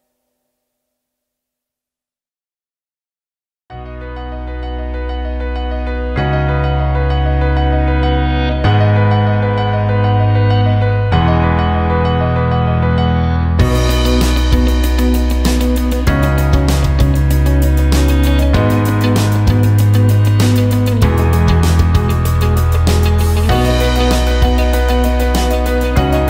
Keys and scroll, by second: 1.9 Delete, 9.9 Delete.